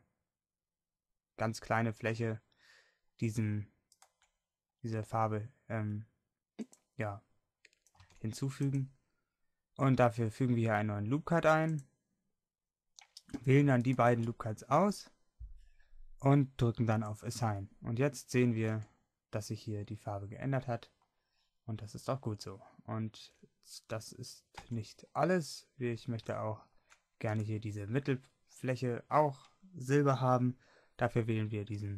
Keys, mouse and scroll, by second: 6.9 x, 8.0 ctrl+r, 12.4-13.8 middle drag, 13.8-18.8 drag, 18.8 Tab, 20.2 click, 21.0 middle click, 22.5 middle click, 24.6 Tab.